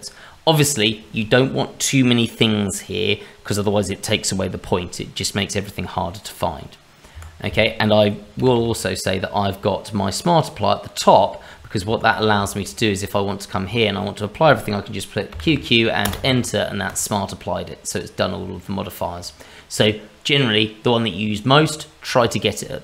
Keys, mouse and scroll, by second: 8.4 q, 8.5 q, 9.3 q, 11.3 q, 11.8 Escape, 12.1 scroll down 2, 12.6 shift+middle click, 12.7 click, 13.0-13.4 scroll up 2, 13.4 middle click, 13.7 shift+middle click, 15.3 q, 15.4 q, 16.9 click, 18.6 shift+middle click, 20.3-21.5 scroll down 1, 21.7 shift+middle click, 22.2 middle click.